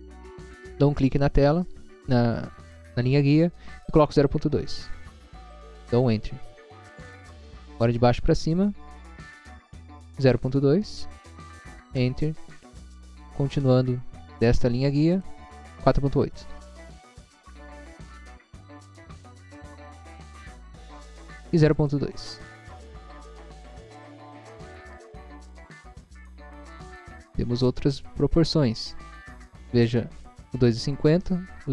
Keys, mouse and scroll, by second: 1.1 click, 4.3-5.3 typing, 5.8 Return, 7.9 click, 10.7-11.5 typing, 12.0 Return, 14.2 scroll up 1, 15.1 click, 17.8-19.1 typing, 19.4 Return, 20.1 scroll down 1, 20.8 scroll up 1, 21.9 click, 23.7-24.5 typing, 24.9 Return, 25.8 scroll up 1.